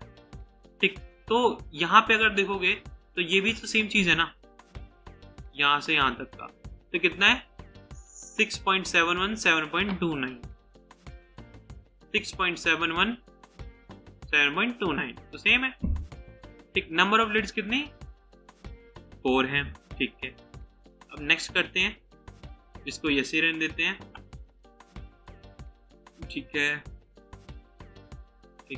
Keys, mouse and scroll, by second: 28.0 double click.